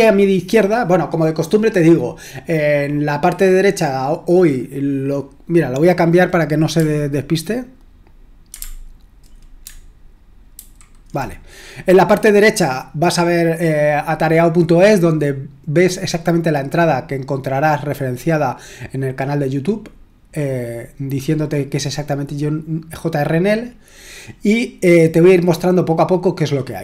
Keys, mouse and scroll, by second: 6.8-8.5 scroll down 1, 8.5-9.3 scroll down 1, 10.6 super+h, 24.9-26.4 scroll down 2, 26.4-26.8 scroll down 1.